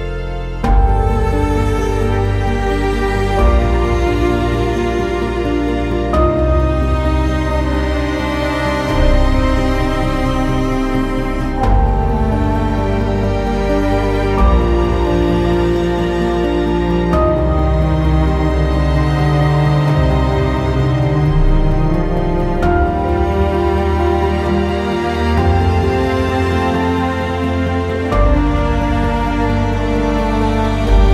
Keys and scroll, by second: 3.3 w, 5.0 w, 11.9 z, 15.1 alt+x, 29.5 ctrl+a.